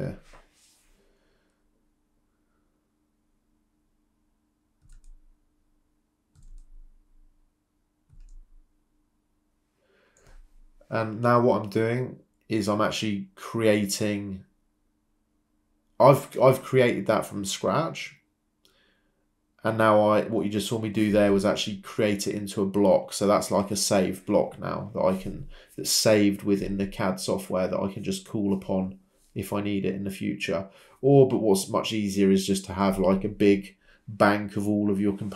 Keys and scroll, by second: 5.0 Escape, 6.1 ctrl+c, 6.1 ctrl+v, 9.7-13.7 typing, 14.1 Return, 14.9 Escape, 20.9 Escape, 30.9 Escape, 32.2 Escape.